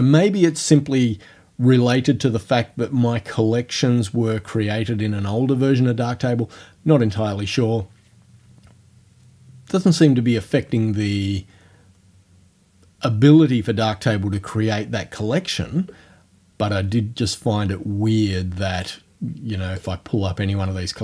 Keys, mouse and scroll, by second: 18.8 click, 19.8 click.